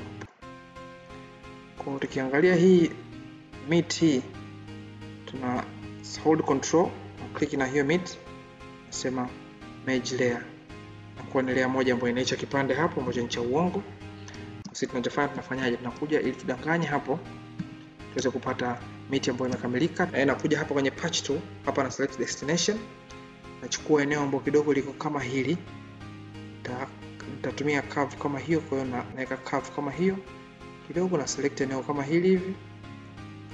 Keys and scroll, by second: 20.1 ctrl+z.